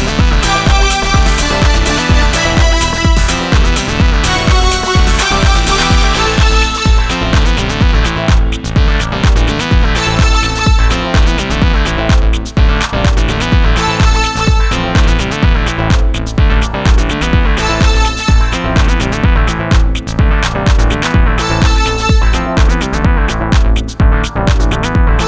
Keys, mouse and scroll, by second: 1.5 x, 3.6 Tab, 4.6 z, 5.9-6.7 middle drag, 8.7 Tab, 11.4-11.9 drag, 12.2 click, 13.1 middle click, 13.2 right click, 13.2 middle click, 13.7 right click, 13.8-15.5 middle drag, 15.5-18.2 middle drag, 18.2 ctrl+z, 19.3-21.7 right drag, 23.3 middle click, 23.5-24.8 middle drag, 24.8 x.